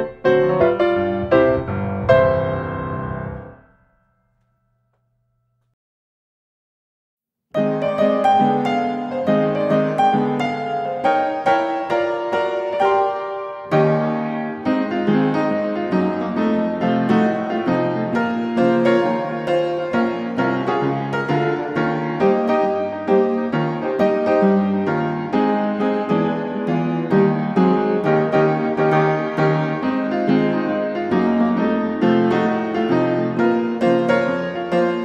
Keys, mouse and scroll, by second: 2.7 click, 5.6 click, 6.0 Escape, 7.9 click, 9.3 click, 10.7-11.9 drag, 12.0 s, 13.2-14.2 drag, 14.3 click, 15.0 middle click, 15.0 middle click, 15.1 middle click, 19.7-20.8 middle drag, 21.0 click, 22.0 click, 23.7-25.2 typing, 26.1 Return, 28.3 click, 30.1 click, 31.6 click, 32.3-33.6 typing, 33.9 Return.